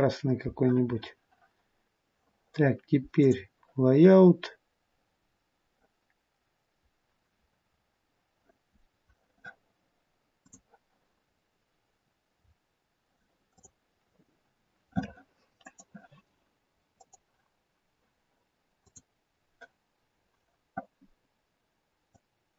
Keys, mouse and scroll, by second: 3.6 click, 4.4 scroll up 2, 5.4 scroll down 1, 10.6 click, 11.5-11.9 scroll up 3, 12.6 scroll down 1, 13.6 scroll down 3, 13.8 click, 15.6 click, 17.2 click.